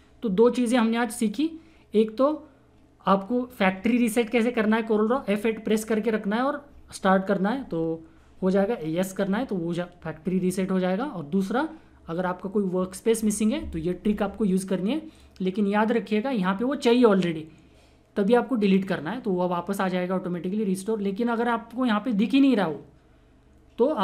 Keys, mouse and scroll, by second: 15.1 click.